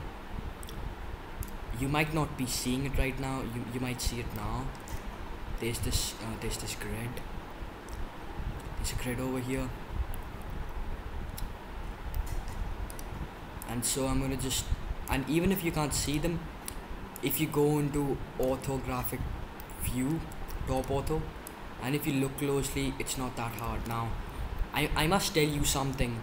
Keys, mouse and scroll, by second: 1.6-9.5 middle drag, 10.6-12.8 middle drag, 12.8-15.0 drag, 17.0-18.3 drag, 21.4-22.4 drag, 25.1 ctrl+z.